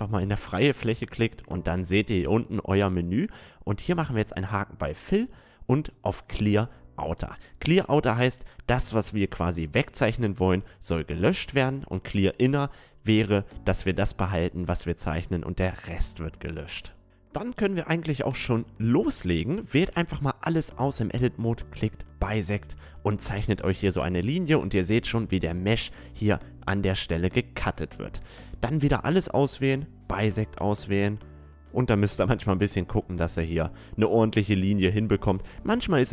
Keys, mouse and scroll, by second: 1.9 click, 5.6 click, 18.3-19.8 drag, 19.1 a, 21.1-22.3 drag, 28.3 a, 28.5 a, 28.9 space, 34.7 a, 35.0 click.